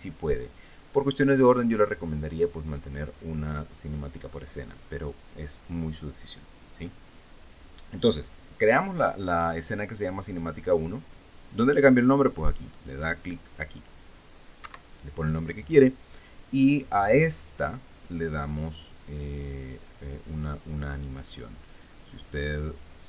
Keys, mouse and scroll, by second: 12.1 click, 13.5 click, 14.1 click, 15.3 Escape, 19.8 click, 22.7 click.